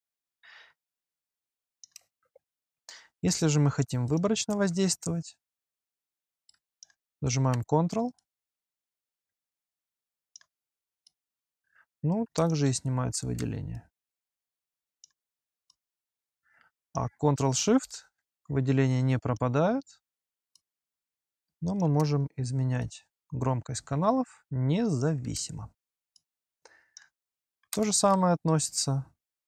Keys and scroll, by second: 25.0 ctrl+s.